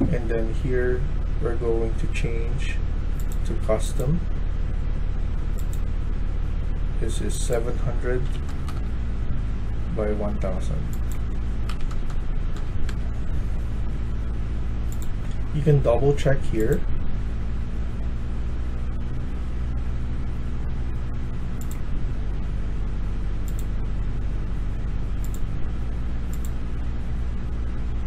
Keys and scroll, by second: 7.9-8.7 typing, 11.3-12.1 typing, 12.8 Return.